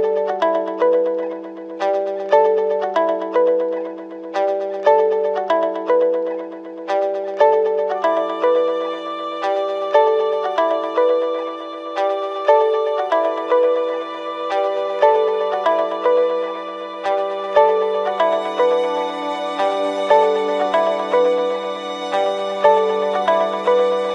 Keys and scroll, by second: 8.7 ctrl+space, 9.1 ctrl+=.